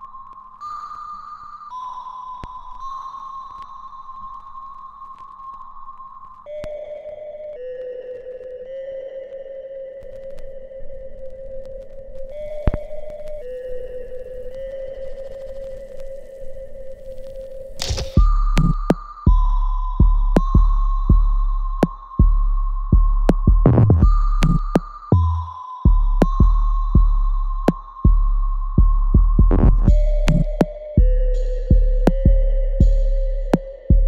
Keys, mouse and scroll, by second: 0.7 alt+middle click, 1.0 right click, 1.0 alt+right click, 1.4 alt+middle click, 2.4 click, 3.9 alt+right click, 4.4 alt+click, 4.8 alt+middle click, 5.4 alt+click, 5.8-7.3 alt+right drag, 7.3-9.0 drag, 9.0-12.5 ctrl+drag, 12.5 right click, 13.0 click, 13.2 alt+right click, 13.6 alt+click, 14.3 alt+right click, 14.6-16.8 alt+drag, 16.8 ctrl+s, 17.3 alt+click, 17.8 alt+right click, 18.3-20.9 alt+drag, 20.9-25.2 alt+drag, 25.2 right click, 26.8 alt+right click, 27.2 click, 27.2 click, 27.6 alt+click, 28.2 alt+middle click, 29.7 ctrl+s, 30.2 click, 30.4-32.7 alt+drag, 32.7 click, 33.0 alt+click, 33.7 click, 33.9 alt+middle click.